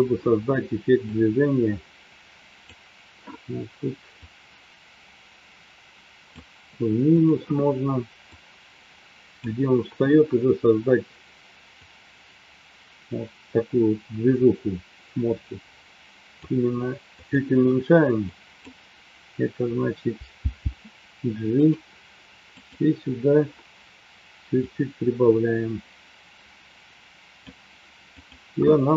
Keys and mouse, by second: 1.4-3.0 drag, 4.4-6.2 drag, 8.6-10.0 drag, 11.9-16.4 drag, 17.1 click, 18.1-18.6 drag, 20.4 g, 21.5 click, 22.7 click, 24.6-27.4 drag.